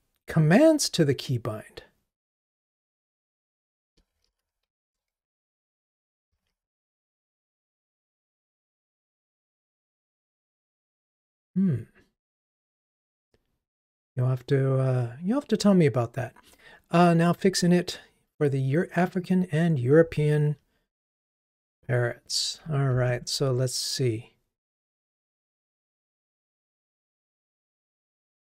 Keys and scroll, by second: 23.3 super+b.